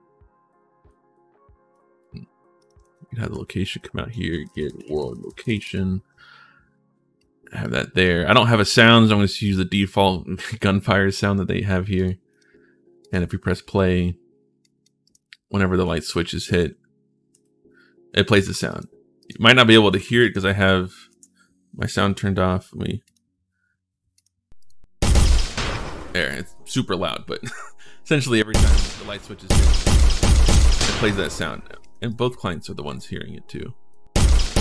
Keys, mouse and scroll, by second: 1.5 click, 2.4 click, 3.5 click, 3.8-5.7 typing, 7.0 click, 7.8 click, 9.1 click, 10.2 click, 11.7 click, 12.1 click, 12.8 click, 14.4 right click, 14.8 right click, 15.6 w, 17.1 right click, 17.9-20.2 typing, 18.5 right click, 19.0 click, 20.0 click, 22.8 click, 23.9 click, 24.4 click, 24.9 right click, 25.7-29.1 typing, 28.3 right click, 29.2 right click, 29.7 right click, 30.0 right click, 30.2 right click, 31.9 right click, 32.6 w, 33.7 d, 33.9 right click, 34.3 right click.